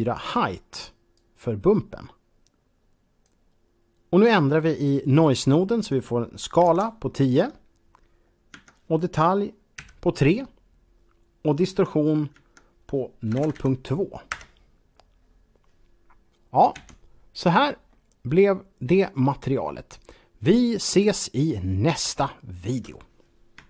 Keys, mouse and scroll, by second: 1.0-3.4 drag, 5.6 click, 6.4 KP_1, 6.4 KP_0, 8.6 Tab, 9.6 KP_3, 11.7 Tab, 12.4 Tab, 13.2 KP_0, 13.4 KP_Decimal, 13.5 KP_2, 14.4 Return, 16.8 KP_Decimal, 17.9-19.5 middle drag, 19.5-20.7 scroll down 1.